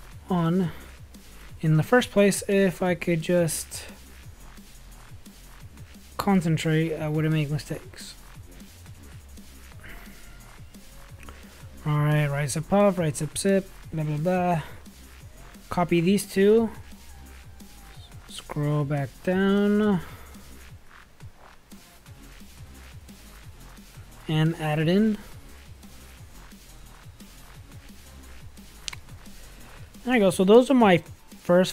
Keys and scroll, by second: 19.6 space.